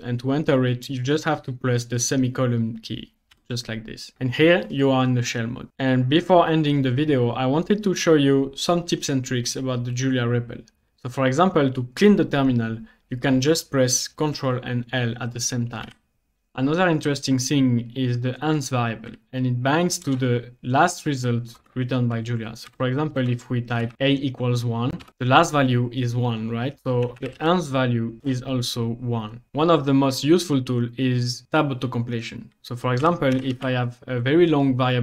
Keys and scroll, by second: 3.4 i, 15.8 ctrl+l, 19.0 a, 20.1 BackSpace, 22.4-23.8 typing, 25.0 Return, 26.8-27.8 typing, 28.2 Return, 32.8-34.0 typing.